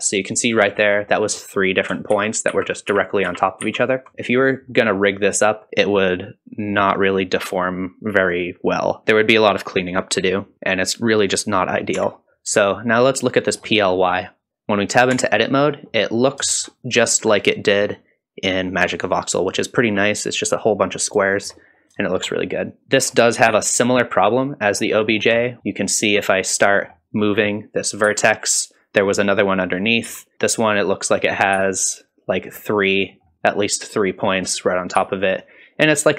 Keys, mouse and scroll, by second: 0.6 middle click, 1.4 middle click, 2.1 ctrl+z, 2.5 ctrl+z, 2.9 ctrl+z, 3.3 ctrl+z, 3.6 ctrl+z, 4.1 shift+middle click, 4.1 scroll down 2, 4.7 middle click, 10.3-11.4 scroll down 2, 10.5-11.4 scroll up 1, 12.0 Tab, 12.7 shift+middle click, 14.0 click, 15.1 Tab, 15.6 middle click, 16.2 scroll up 1, 16.5 shift+middle click, 21.2 shift+middle click, 21.7-23.0 scroll up 4, 22.0 shift+middle click, 22.8 middle click, 23.5 KP_Decimal, 24.1-24.7 scroll up 1, 24.7-25.3 scroll up 3, 25.4 shift+middle click, 26.3 click, 28.0 g, 29.8 click, 30.1 g, 30.3 g, 31.3 click, 31.5 g, 32.5 middle click, 33.1 middle click, 34.6 click, 35.0 g, 36.0 click.